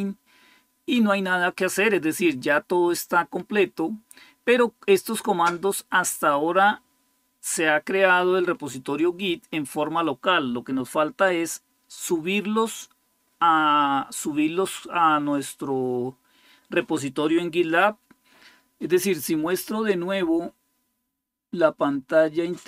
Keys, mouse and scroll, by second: 22.4 click.